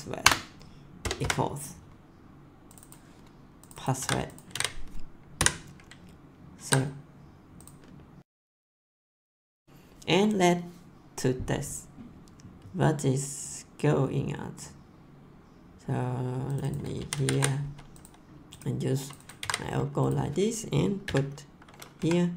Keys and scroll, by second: 0.0-1.2 typing, 0.2 Return, 3.9 ctrl+c, 4.5 ctrl+v, 5.3 ;, 6.5 ctrl+s, 17.0 ctrl+c, 19.4 ctrl+v, 21.0 ,, 21.9 Left.